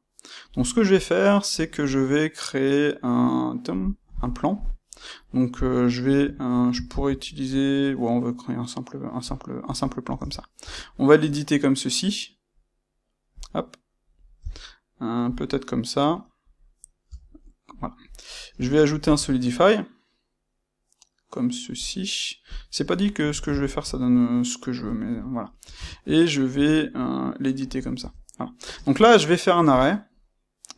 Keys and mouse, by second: 4.4-13.3 middle drag, 5.5 space, 6.2 Escape, 6.8 shift+c, 9.2 shift+c, 10.1 Tab, 13.3 click, 13.5-15.4 middle drag, 15.4 click, 17.0 Tab, 17.4-22.5 middle drag, 18.5 space, 22.5 click, 23.0-27.6 middle drag, 25.7 Tab, 27.6 click, 28.0 Tab, 28.6 space, 29.8 space.